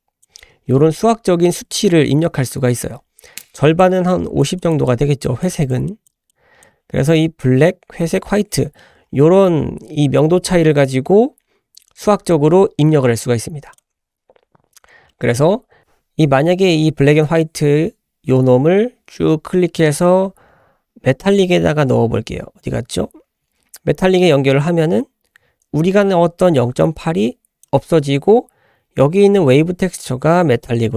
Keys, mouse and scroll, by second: 3.6 click, 4.1 click, 4.6 click, 5.4 click, 6.3 click, 13.7 click, 14.1 scroll down 2, 14.7 scroll up 1, 15.1 middle click, 15.3 scroll up 2, 17.4-27.7 drag.